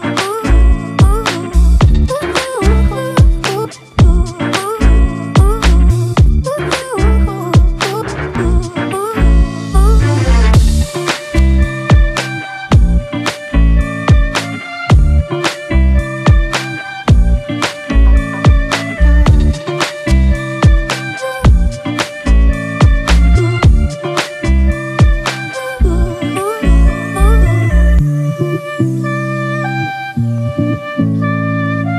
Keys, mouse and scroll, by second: 5.5 double click, 8.5-9.1 typing, 9.5 double click, 10.3-12.7 typing, 11.2 double click, 14.3 double click, 15.0 [, 15.9 double click, 18.4-19.9 typing, 19.0 double click, 24.9 typing, 28.1 typing.